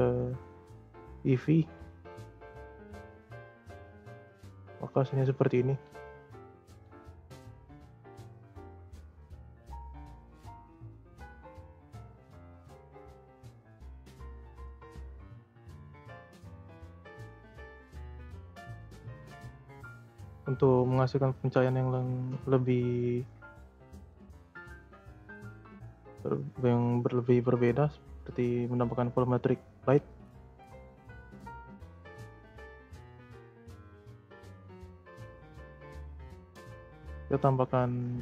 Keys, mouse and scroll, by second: 2.3-5.3 drag, 5.6 space, 6.6 space, 8.7-10.2 drag, 10.2-11.6 scroll down 2, 11.6-15.4 drag, 15.4 scroll up 2, 17.6-18.9 drag, 18.9-19.3 scroll down 1, 21.4-24.1 drag, 24.1 scroll down 2, 24.7 middle click, 25.1-25.5 scroll down 1, 26.0-28.6 middle drag, 28.6-29.7 scroll down 2, 29.7-30.4 scroll down 1, 30.4 scroll down 1, 30.6-31.1 scroll up 11, 31.1-32.0 scroll down 7, 32.0-32.3 scroll down 1, 32.3-34.8 scroll up 21, 36.4 click, 36.9 scroll down 2, 37.1-38.2 middle drag.